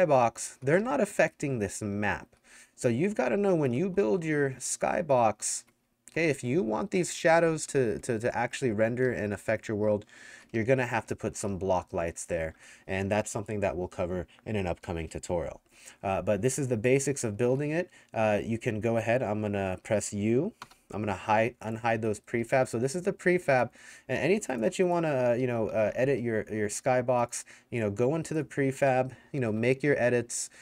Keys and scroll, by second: 0.0-13.1 typing, 17.0-19.4 typing, 20.6 u, 22.4 d, 24.0 w, 25.1-27.4 typing, 28.7-30.4 typing.